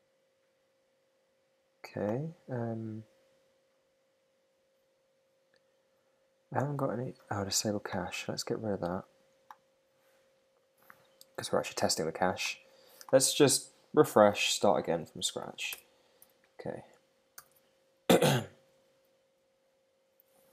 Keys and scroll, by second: 14.9 shift+super+Left, 15.4 shift+Up, 17.4 super+r.